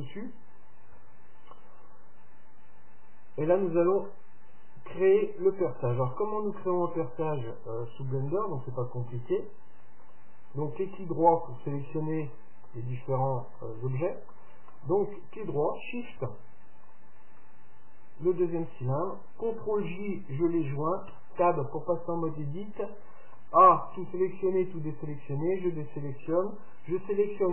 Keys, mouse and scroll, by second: 2.1-3.9 middle drag, 4.1-6.0 middle drag, 8.3-10.1 middle drag, 10.1-16.7 right drag, 16.9-18.9 right drag, 20.0 ctrl+j, 21.2 Tab, 22.5-24.5 middle drag, 23.7 a, 24.5 a, 25.5 a.